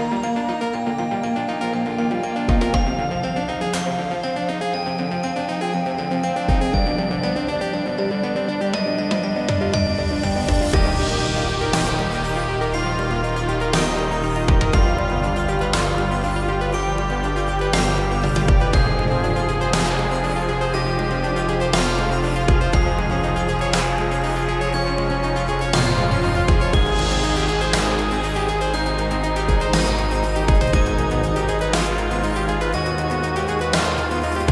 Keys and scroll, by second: 1.5 ctrl+c, 3.4 ctrl+v.